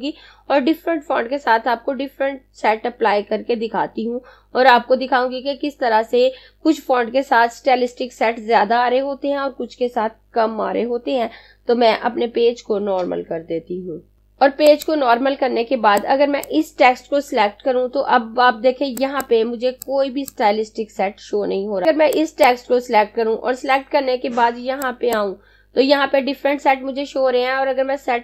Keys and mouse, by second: 13.8 click, 19.0 click, 24.9 click.